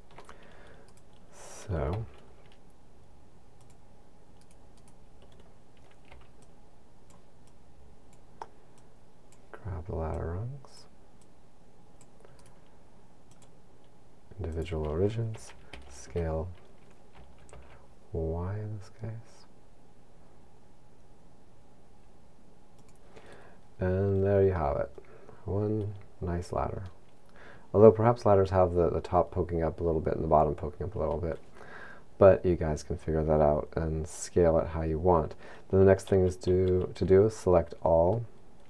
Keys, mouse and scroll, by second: 0.9 right click, 1.9 c, 4.5 right click, 4.8 right click, 6.1 c, 12.5 right click, 13.4 click, 14.7 click, 15.7 s, 22.9 click, 23.9-24.4 scroll down 2, 24.6 middle click, 27.3-28.1 scroll up 1, 36.2 a, 36.5 a, 37.6-38.1 scroll up 1, 38.2 middle click.